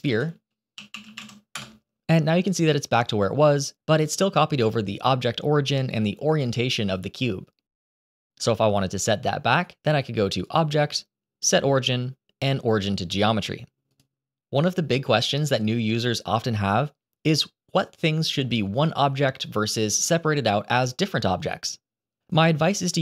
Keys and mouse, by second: 0.1-1.5 drag, 3.8 g, 10.2-13.9 drag.